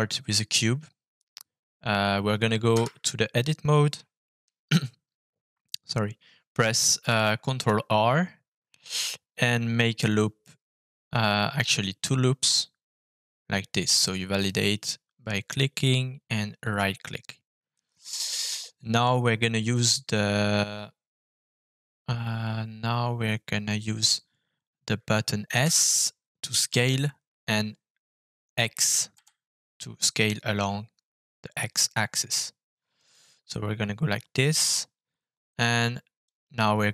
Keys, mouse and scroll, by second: 0.1-0.5 scroll up 2, 2.7 Tab, 6.9 ctrl+r, 16.6 right click, 17.7-19.0 middle drag, 25.8 s, 29.1 x, 32.9 click, 36.2-36.9 drag.